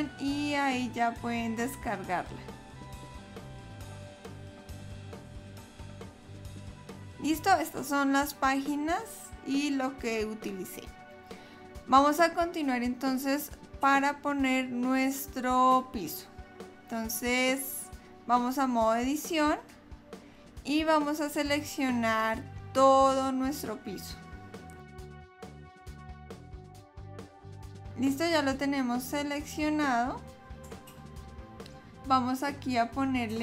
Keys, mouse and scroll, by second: 11.0 click, 11.5 click, 16.1 click, 20.6 click, 22.5 click, 25.1 click, 25.7 shift+click.